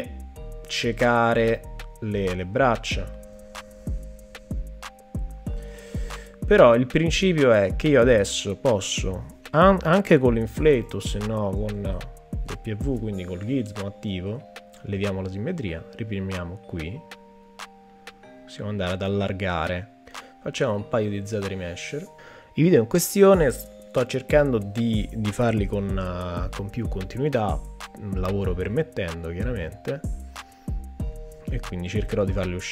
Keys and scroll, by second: 10.9 w, 14.4 x.